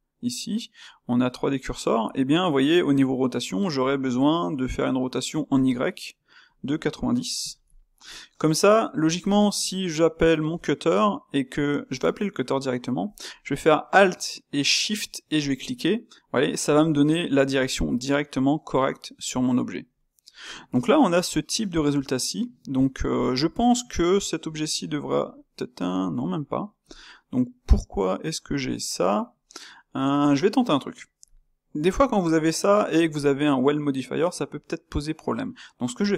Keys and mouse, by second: 4.1-8.0 middle drag, 8.0 click, 8.7-13.0 middle drag, 13.0 space, 18.0-23.1 middle drag, 24.4 space, 28.5 click, 31.6-36.1 middle drag.